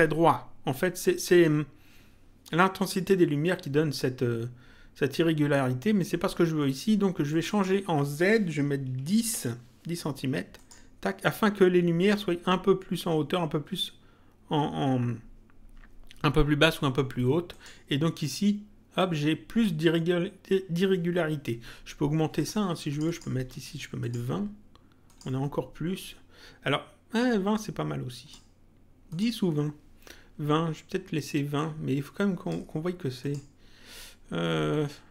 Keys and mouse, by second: 7.2 click, 10.5 click, 17.5 click, 22.3 click, 27.2 click, 29.0 click, 31.5 click, 33.2 click.